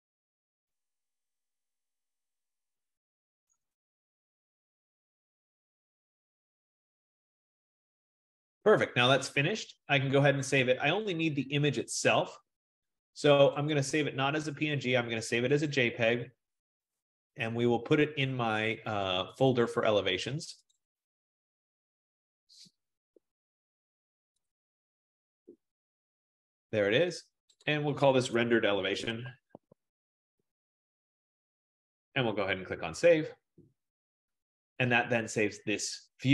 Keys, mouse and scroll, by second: 4.4 F15, 11.2 click, 13.9 click, 15.8 click, 16.9 click, 19.5 click, 19.7 click, 20.9 click, 21.1 click, 21.9 click, 22.1 click, 24.6 click, 24.8 click, 25.7 click, 25.8 click, 27.8 click, 28.8-32.4 typing, 35.0-35.7 typing.